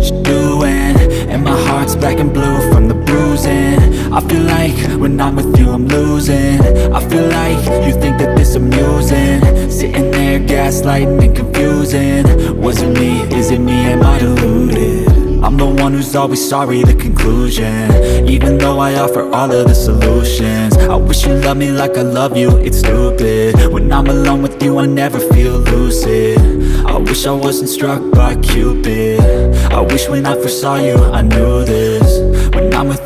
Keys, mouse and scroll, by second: 1.4 click, 2.0 click, 3.1 click, 3.8 F4, 4.2 click, 6.9 F9, 7.9 click, 9.9 ctrl+click, 11.8-12.1 scroll down 1, 12.6 click, 13.7 click, 15.3-15.7 scroll up 1, 16.0 scroll down 1, 16.7 F4, 17.1 click, 18.5 ctrl+o, 19.1 scroll down 1, 22.8 click, 24.5 click, 26.3 ctrl+o, 27.1 scroll down 1, 29.6 click, 30.3 click, 31.0 click, 32.8 F4.